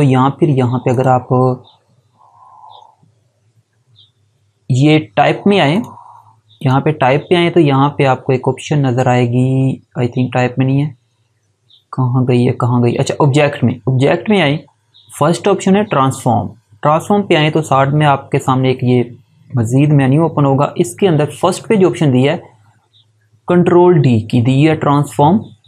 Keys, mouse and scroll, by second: 0.8 click, 5.6 click.